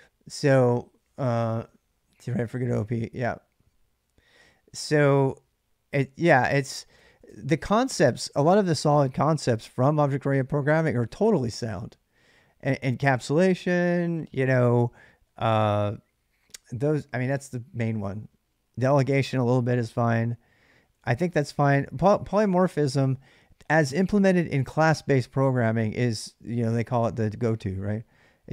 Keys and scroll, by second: 5.9 ctrl+[, 6.5-7.7 typing, 20.7 j, 20.9 j, 21.3 j.